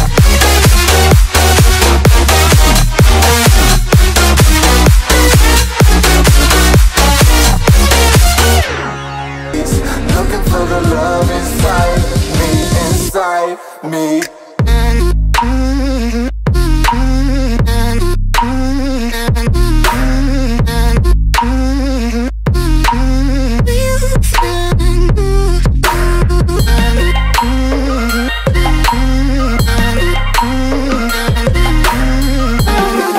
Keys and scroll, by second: 0.0-0.4 typing, 1.1 ctrl+a, 4.9 ctrl+a, 5.9 Right, 6.0 space, 6.3 Right, 6.6 Left, 7.5 Right, 8.5 ctrl+v, 18.4 Return, 18.9 ctrl+[, 20.6 Return, 20.9 ctrl+[, 23.5 ctrl+], 26.3 ctrl+[, 28.3 ctrl+j, 29.0 ctrl+t, 32.1 Return, 32.7 ctrl+].